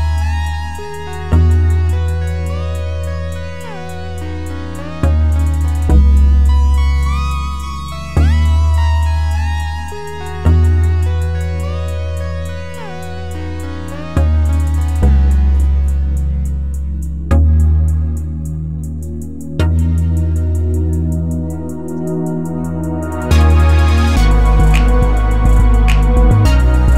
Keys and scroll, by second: 4.6 1, 4.8 Return.